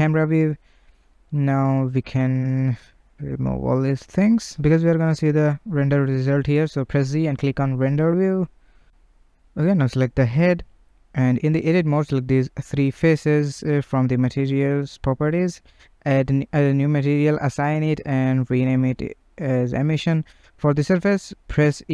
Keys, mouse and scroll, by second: 0.0-1.1 scroll, 1.1 t, 2.9 click, 3.5 scroll, 4.1-5.7 shift+middle drag, 5.7 click, 6.6-8.7 shift+middle drag, 11.4 click, 12.0 Tab, 12.3 3, 14.6 click, 16.2-19.6 drag, 19.6 s, 20.4-21.9 drag.